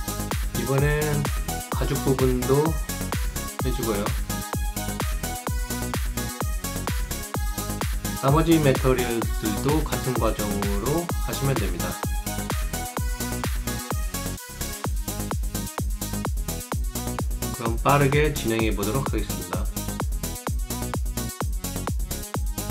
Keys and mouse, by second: 0.0 alt+middle click, 0.1 alt+click, 3.0 click, 4.0 click, 4.3 alt+click, 4.4 alt+right click, 6.4 ctrl+alt+click, 7.3 click, 8.7 click, 9.3 right click, 9.6 click, 10.4 click, 12.0 alt+click, 12.7 alt+middle click, 12.9 alt+right click, 13.4 alt+click, 13.8 alt+middle click, 13.9 alt+click, 18.4 click, 22.4 alt+click.